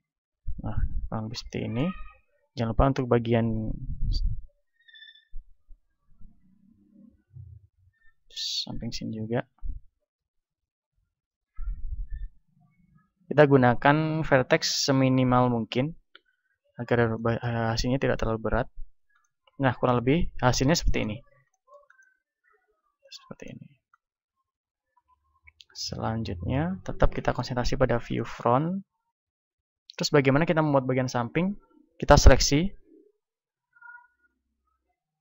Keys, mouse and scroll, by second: 2.1 a, 3.6 b, 4.2 middle click, 5.2 g, 7.3-9.0 drag, 7.9 e, 9.4-10.9 drag, 10.2 e, 11.9-15.3 drag, 12.3 e, 14.1 e, 15.6-18.6 drag, 18.6-26.4 middle drag, 18.6 z, 26.4 KP_1, 27.0-32.6 middle drag, 29.0 a, 32.6 z, 33.8 b.